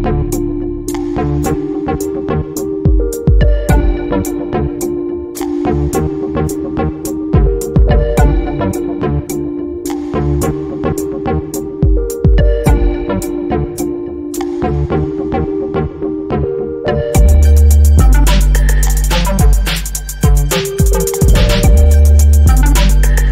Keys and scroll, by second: 9.2 Down, 23.0 Down.